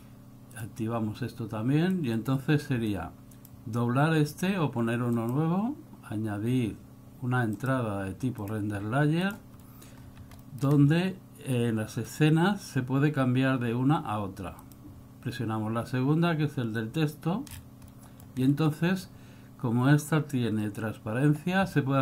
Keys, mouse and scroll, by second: 0.6 click, 2.1 click, 3.0 click, 5.2 click, 9.7 middle click, 10.1 scroll up 4, 10.5 middle click, 10.9-11.4 scroll up 1, 12.2 click, 17.6 scroll down 4, 18.0 middle click, 18.5 scroll down 2.